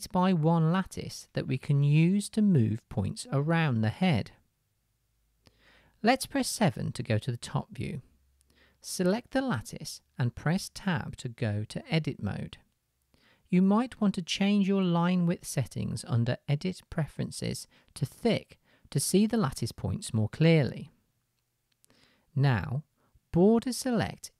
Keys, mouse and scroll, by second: 6.7 middle click, 6.7 KP_7, 7.4-8.6 middle drag, 8.9 middle drag, 10.7 Tab, 11.7 shift+middle click, 14.7 middle click, 14.9-22.1 drag, 22.1 middle click, 22.8-24.3 drag, 24.0 g.